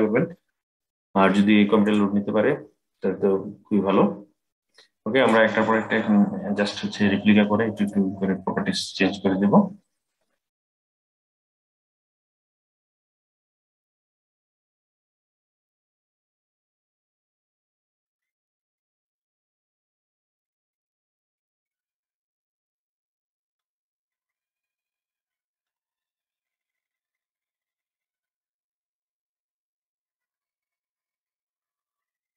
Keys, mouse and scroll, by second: 1.5 click, 4.9-7.9 drag, 9.1-10.9 scroll up 1, 10.9 middle click, 11.3 click, 12.9 middle click, 13.2-15.1 drag, 15.6 click, 17.3-18.9 drag, 19.6 click, 20.7-22.3 drag, 23.7 click, 24.7 click, 25.0-25.9 scroll down 3, 25.9 click, 27.1 click, 28.5 click, 30.1 click, 31.0 click, 32.2-32.3 scroll up 6.